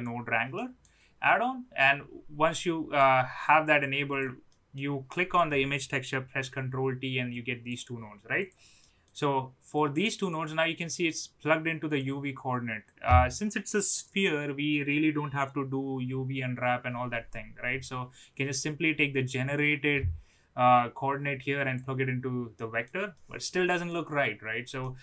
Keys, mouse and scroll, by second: 0.7 middle click, 2.5 click, 3.4-3.8 drag, 4.6 middle click, 5.1 click, 7.5 click, 8.9 middle click, 9.7-10.3 drag, 10.8-12.0 drag, 13.0-21.7 drag, 22.5 middle click, 23.1-23.8 middle drag, 24.7 middle click.